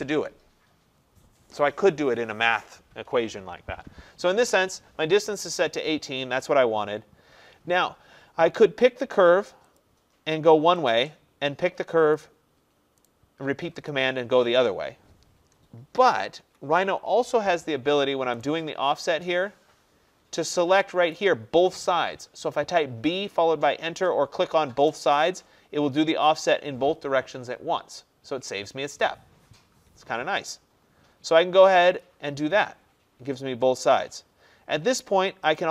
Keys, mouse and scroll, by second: 9.8 click, 11.0 click, 13.1 right click, 14.0 click, 16.1 ctrl+z, 16.5 ctrl+z, 18.4 right click, 25.2 click, 32.1 click, 35.6 click.